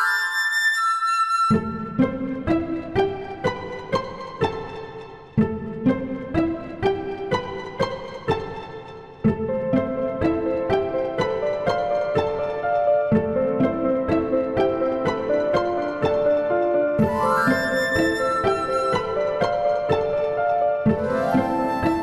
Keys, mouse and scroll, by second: 0.2 click, 1.8 click, 2.5 click, 3.6 click, 4.3-5.9 drag, 6.8 click, 8.5 ctrl+z, 8.7 ctrl+z, 9.7 click, 10.2 click, 12.4 KP_Decimal, 14.8 click, 15.8 r, 17.2 ctrl+z, 17.7 click, 18.9 click, 20.7 click, 21.8 click.